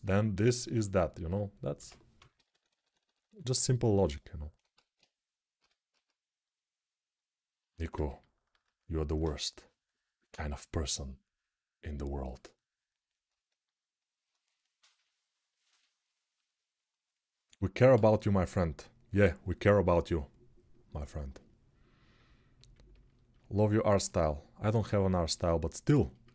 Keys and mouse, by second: 1.5-3.0 typing, 4.6 alt+q, 5.4 h, 5.7 g.